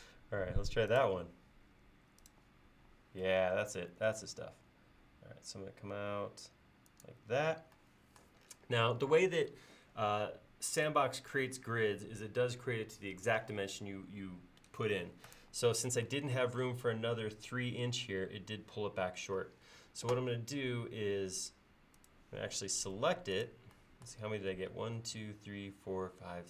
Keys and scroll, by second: 22.9 space.